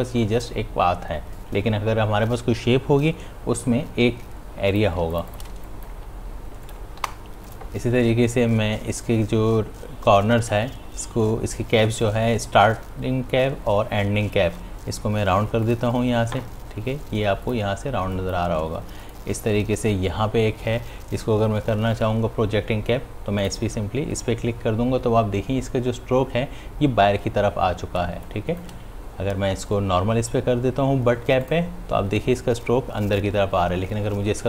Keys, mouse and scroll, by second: 4.2 v, 5.9 click, 16.8 click, 17.4 space, 17.6 ctrl+click, 23.5 click, 28.1 space, 32.4 click.